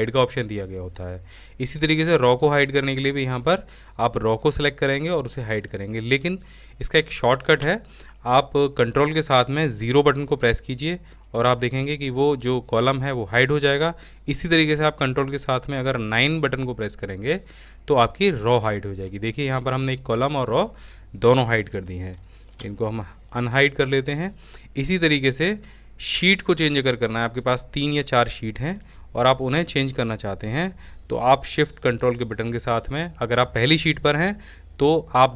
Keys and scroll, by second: 7.9 ctrl+0, 16.2-17.1 typing, 17.1 ctrl+shift+9, 35.2-35.3 typing.